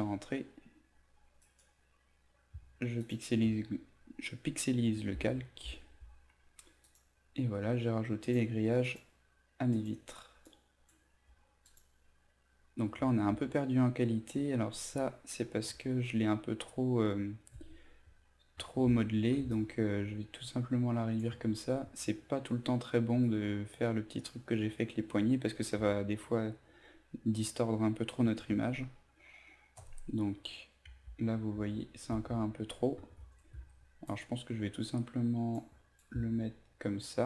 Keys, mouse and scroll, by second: 1.4-2.6 right drag, 3.0 click, 3.4 z, 6.8-12.7 drag, 15.7 ctrl+alt+z, 19.5 alt+shift+click, 23.2 ctrl+click, 31.5 ctrl+alt+z, 34.0 alt+shift+click, 36.0-37.2 drag.